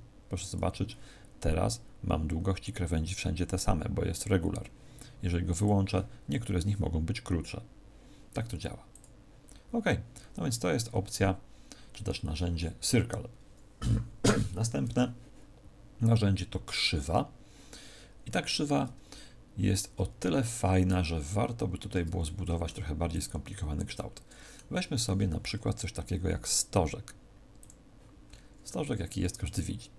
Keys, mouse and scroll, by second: 0.4 click, 5.5 click, 8.9 click, 21.3-21.6 scroll down 1, 21.9 Tab, 21.9-22.2 scroll down 5, 22.2 middle click, 22.9 x, 23.9 middle click, 24.9 shift+a, 28.2-28.5 scroll up 2, 29.3 Tab, 29.3-29.9 scroll up 4.